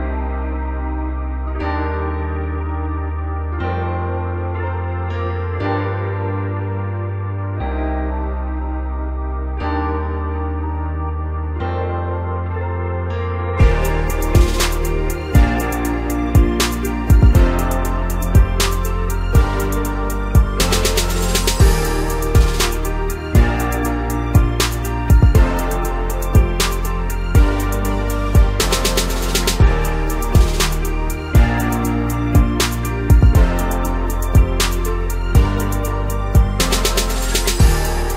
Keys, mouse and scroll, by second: 0.6-1.2 scroll up 2, 1.2 KP_1, 1.8-2.3 scroll up 4, 2.3 Tab, 3.4 click, 3.8-4.7 scroll down 2, 4.7 click, 6.3 x, 7.7-8.8 scroll up 1, 8.8 click, 11.6-12.1 scroll up 2, 12.1-12.8 scroll down 1, 12.8 ctrl+KP_8, 13.2 ctrl+KP_8, 14.7 g, 16.2 r, 17.7 s, 20.3 ctrl+KP_Subtract, 21.8 g, 23.3 r, 24.9 s, 27.4 ctrl+KP_Subtract, 28.4 g, 30.3 r, 31.9 s, 33.3-35.0 middle drag, 35.0 KP_1, 36.5 ctrl+KP_Subtract, 37.8 g.